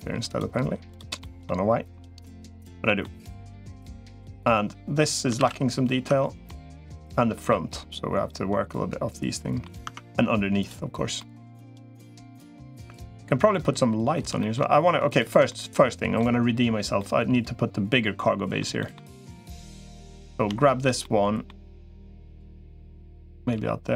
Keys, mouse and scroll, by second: 1.0 middle click, 2.6 middle click, 3.5 middle click, 5.2 ctrl+s, 6.0 Tab, 6.2 middle click, 7.3-9.4 middle drag, 9.6 Tab, 10.4 click, 11.0-13.9 middle drag, 14.2 shift+middle click, 15.3 middle click, 16.8-18.4 middle drag, 18.6 middle click, 20.8 middle click, 22.0 click, 23.4 g.